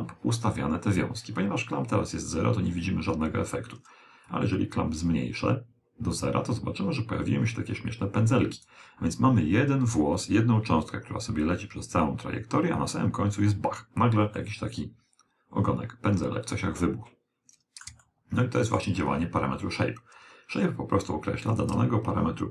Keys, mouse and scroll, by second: 4.3 click, 14.4-16.3 middle drag, 18.1-19.8 middle drag, 21.5 click.